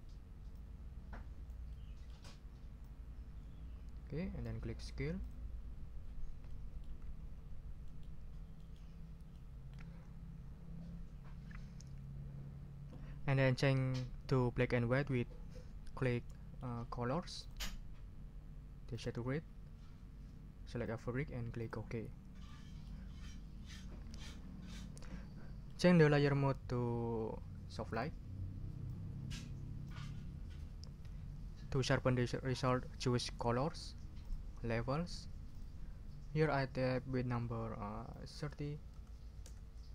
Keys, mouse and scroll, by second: 0.5-1.7 drag, 1.7 middle click, 2.8-4.6 drag, 5.2 click, 6.5 middle click, 7.2-7.7 ctrl+scroll up 4, 7.9 ctrl+middle click, 8.1 ctrl+scroll down 2, 8.9 ctrl+scroll down 2, 9.7 ctrl+middle click, 16.2 click, 17.4 click, 18.9 click, 20.8 click, 21.6 ctrl+click, 22.0 ctrl+scroll up 2, 22.5 ctrl+middle click, 23.4 ctrl+scroll down 2, 24.1 ctrl+click, 24.2-25.9 ctrl+middle drag, 27.9 click, 28.8-30.0 drag, 34.2 click, 35.5 click, 38.1 click, 38.9 3, 39.4 0.